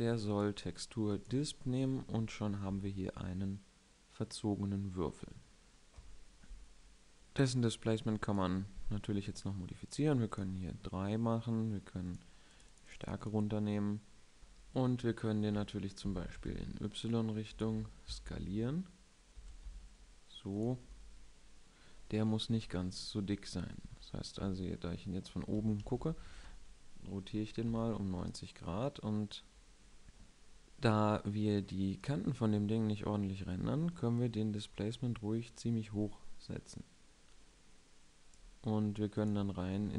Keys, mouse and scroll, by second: 0.8-2.0 drag, 14.6-16.0 middle drag, 15.7 s, 19.1 s, 20.3 drag, 20.6-22.2 middle drag, 22.2 KP_7, 23.5 KP_1, 24.0 KP_7, 25.2 r, 31.2-33.6 middle drag, 33.6-35.4 drag.